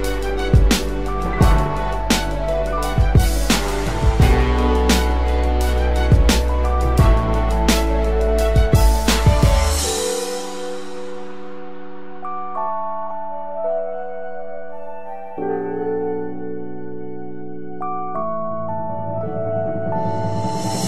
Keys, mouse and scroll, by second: 13.6-16.1 scroll down 1, 18.9-19.9 typing.